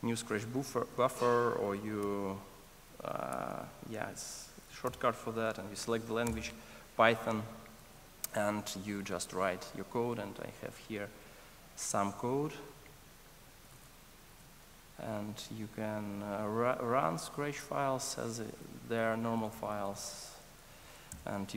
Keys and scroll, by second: 2.0 ctrl+shift+super+o, 3.3 shift+super+n, 14.4 super+v, 17.6 ctrl+shift+r, 21.2 Return.